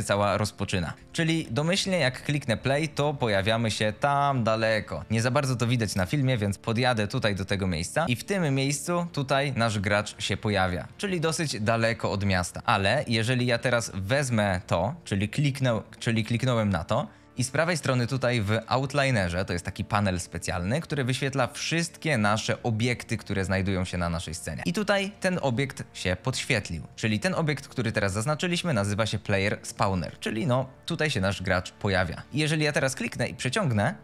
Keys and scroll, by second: 1.6 w, 2.3 a, 5.8 Escape, 6.3-7.8 typing, 10.1 a, 10.7 s, 12.6 d, 13.5 e, 13.8 s, 32.2 F22.